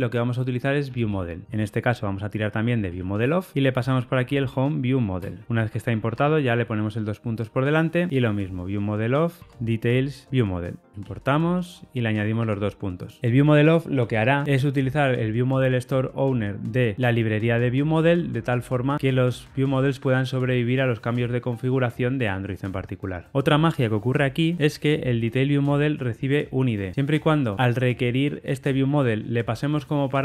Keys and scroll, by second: 3.2 Return, 5.2 Return, 9.4 Tab, 13.0 alt+Return, 24.5 super+b.